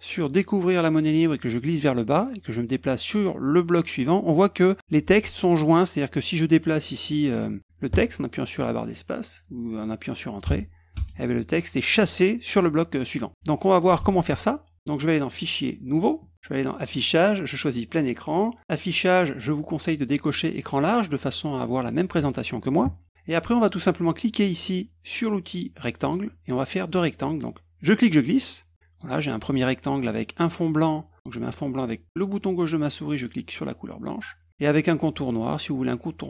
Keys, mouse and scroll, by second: 0.2-5.2 drag, 7.0 click, 10.4 Return, 10.9 Return, 14.0 ctrl+z, 15.3 click, 15.8 click, 16.8 click, 17.8 click, 18.6 click, 20.6 click, 26.0 click, 27.8-29.0 drag, 33.9 click.